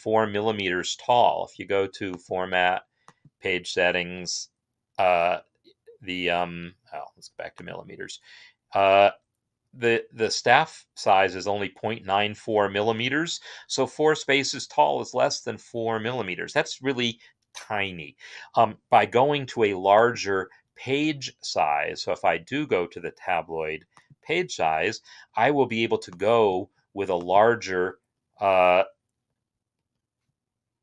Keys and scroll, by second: 27.8 Up.